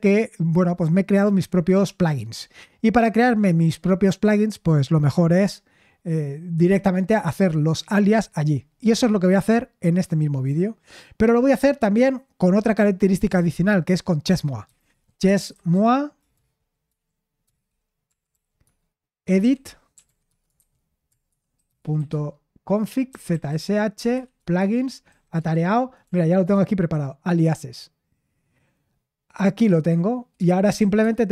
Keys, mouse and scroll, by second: 14.3-25.5 typing, 26.0 Right, 26.4 Return, 30.7-31.3 typing.